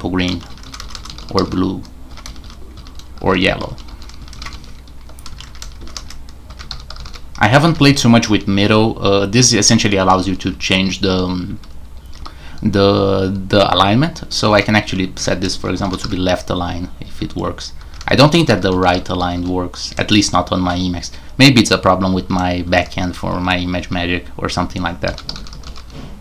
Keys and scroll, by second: 0.0-8.3 typing, 9.6-11.1 typing, 14.2-16.5 typing, 17.8-19.9 typing, 22.2-23.8 typing, 24.8-26.2 typing.